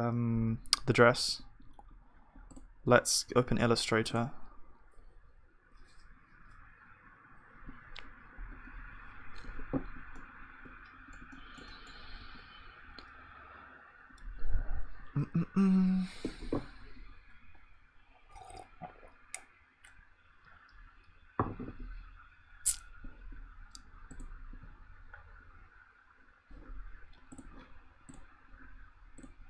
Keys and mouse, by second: 8.4-15.5 middle drag, 12.2 KP_1.